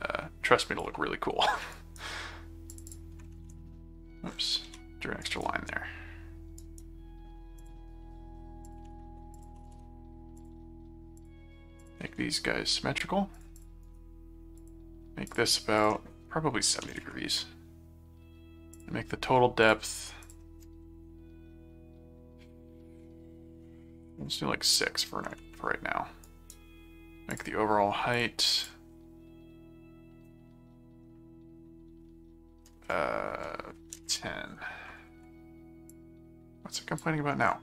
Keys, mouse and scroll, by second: 1.7 right click, 2.7 click, 4.6 ctrl+z, 5.3 right click, 6.6 right click, 7.6 click, 8.7 click, 9.3 alt+click, 9.5 alt+c, 9.7 v, 10.4 ctrl+click, 11.2 ctrl+click, 11.8 ctrl+click, 13.3 click, 13.8 right click, 14.6 click, 15.2 click, 18.7 click, 19.6 click, 20.3 click, 26.2 right click, 27.3 click, 28.1 click, 35.9 click.